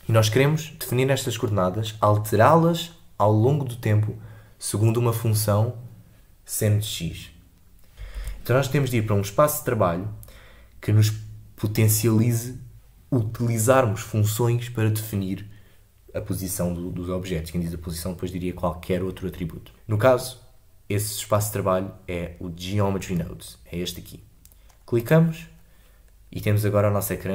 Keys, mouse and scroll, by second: 7.9 click, 8.1 ctrl+z, 25.0 click.